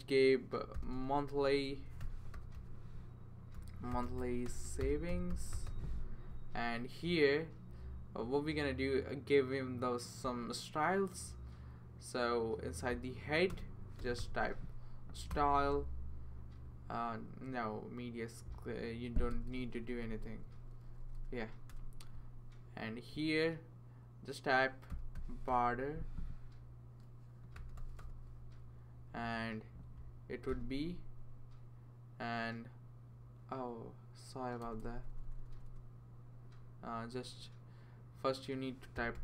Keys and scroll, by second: 0.5-7.7 typing, 13.5 Return, 13.7-14.7 typing, 15.3 Return, 19.3 BackSpace, 19.5 BackSpace, 19.6 BackSpace, 19.8 BackSpace, 24.6-26.0 typing, 27.3-28.5 typing, 30.5 typing, 34.6 BackSpace, 34.8 BackSpace, 34.9 BackSpace, 35.1 BackSpace, 38.7-39.2 typing.